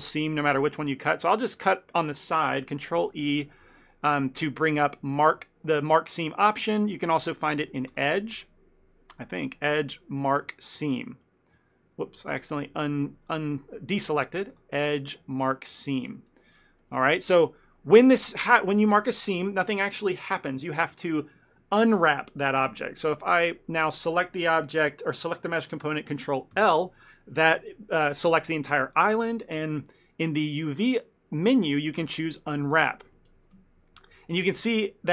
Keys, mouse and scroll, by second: 1.4 middle click, 3.3 ctrl+e, 8.0 click, 8.0 scroll up 1, 9.2 click, 12.3 ctrl+z, 12.7 ctrl+z, 14.6 click, 16.9 middle click, 23.6 click, 26.6 ctrl+l, 30.9 click, 34.2 ctrl+middle click.